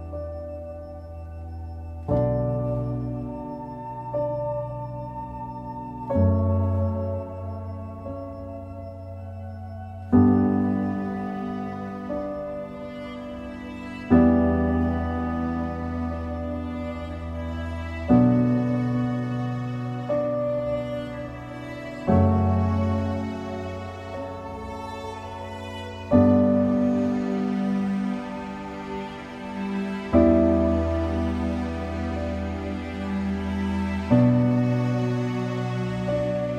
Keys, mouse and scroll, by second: 0.3-2.8 middle drag, 2.8 shift+a, 4.9 scroll up 1, 5.0 middle click, 5.3 scroll down 1, 5.6-7.2 middle drag, 7.2 r, 9.9 s, 11.6-14.3 middle drag, 14.3 g, 15.8 middle click, 16.4 scroll up 1, 16.6-17.6 shift+middle drag, 17.6 ctrl+a, 19.5 click, 19.8 scroll down 3, 20.4-21.4 drag, 21.8-23.0 right drag, 23.0-24.9 shift+middle drag, 24.9 Tab, 25.2 click, 26.0 click, 26.8 middle click, 27.8 shift+click, 28.5 x, 29.5 scroll down 1, 29.6-31.3 middle drag, 31.3 2, 32.3 ctrl+r.